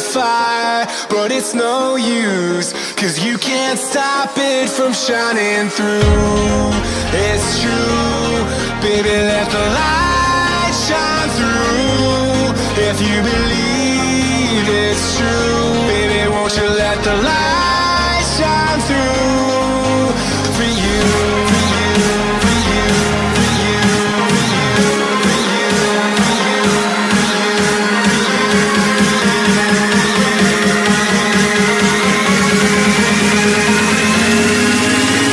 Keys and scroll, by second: 1.7 space, 2.0 z, 4.5-6.9 typing, 9.6 space, 10.1 space, 10.6 space, 10.7 x, 11.9 space, 13.0 space, 13.1 z, 14.7 z, 16.8 x, 20.6 x, 22.0 z, 23.1-25.3 typing, 26.9 space, 27.2 x, 29.7 space, 31.4 space, 32.6 z, 34.9-35.3 typing.